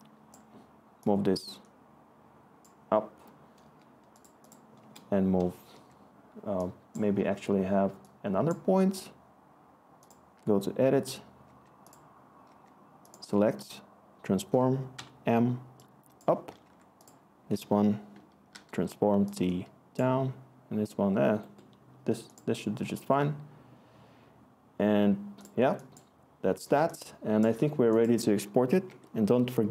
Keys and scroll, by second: 4.8 Return, 5.7 s, 11.4 s, 12.4 s, 13.5 t, 14.9 m, 16.6 s, 18.5 t, 27.1-27.8 scroll, 28.8 Tab, 29.5-29.7 typing.